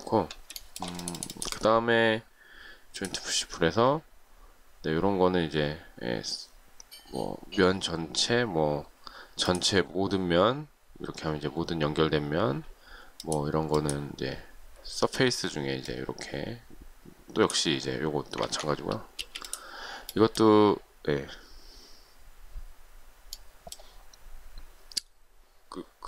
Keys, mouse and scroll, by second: 0.5 shift+middle click, 18.4 ctrl+z, 19.1 space.